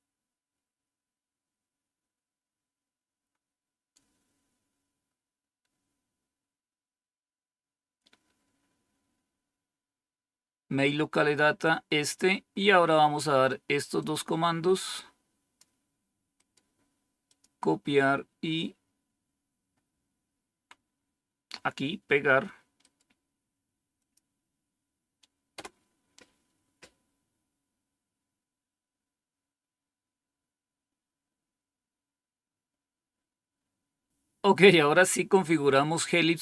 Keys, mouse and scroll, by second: 1.5 scroll down 1, 2.0-3.1 scroll down 1, 3.1-4.4 scroll down 1, 4.4-5.1 scroll down 1, 5.1-5.5 scroll down 1, 6.9-8.3 scroll down 2, 8.3-9.3 scroll down 2, 11.6 scroll down 2, 12.2-13.9 scroll down 2, 13.9-15.5 drag, 16.3 right click, 17.2 click, 23.9 click, 25.5 Return, 35.1-36.0 scroll down 1, 36.0-36.4 scroll down 1.